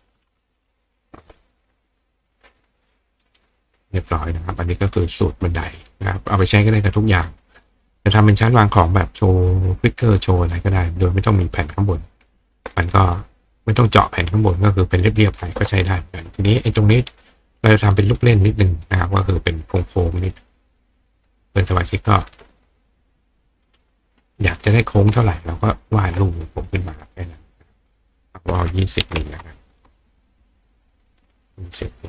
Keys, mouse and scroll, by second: 2.6 click, 7.3 click, 16.5 click, 18.8 click, 19.4 click, 23.7 click, 25.2 ctrl+click, 27.2 click, 27.9 click, 31.1 click.